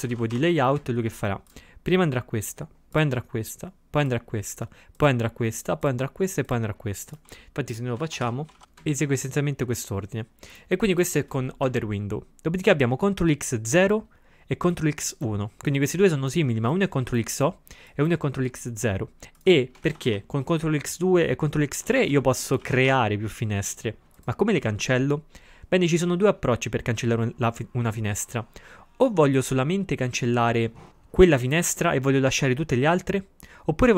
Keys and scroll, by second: 8.1 ctrl+x, 8.2 o, 8.6 ctrl+x, 8.6 o, 19.9 ctrl+x, 20.1 1, 21.9 ctrl+x, 22.1 2, 22.7 ctrl+x, 22.9 3.